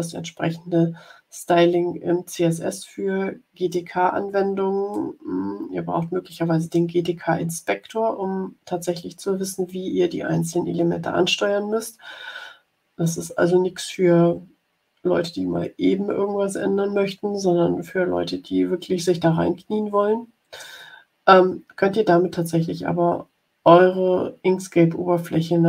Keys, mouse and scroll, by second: 5.0-7.0 drag.